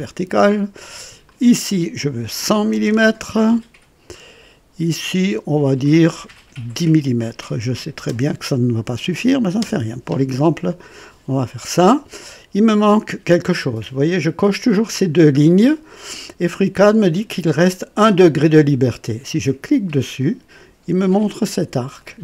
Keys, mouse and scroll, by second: 1.2 click, 2.4-2.9 typing, 4.1 click, 4.1 typing, 5.8 click, 7.8 KP_1, 8.0 KP_0, 9.6 Return, 20.0 click, 21.9-22.2 drag.